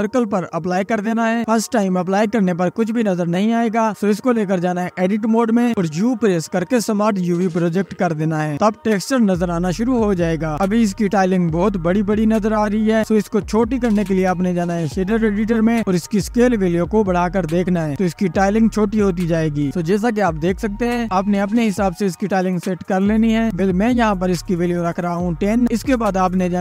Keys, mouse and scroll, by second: 0.0-1.6 scroll down 1, 1.6 u, 9.8 Tab, 10.0-11.0 scroll up 1, 11.0 scroll up 1, 11.2 click, 11.8-12.9 drag, 14.3-19.8 drag, 22.9 click, 23.6-26.6 drag.